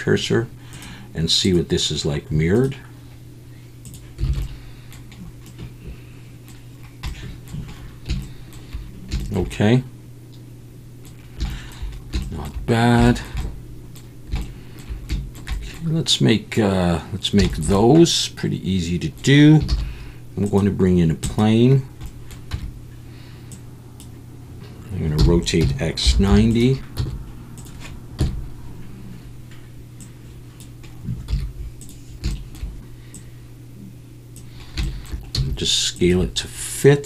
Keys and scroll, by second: 4.3 alt+a, 19.7 shift+a, 22.5 Tab, 25.2-27.0 typing, 28.2 KP_1, 31.3 z, 35.3 s.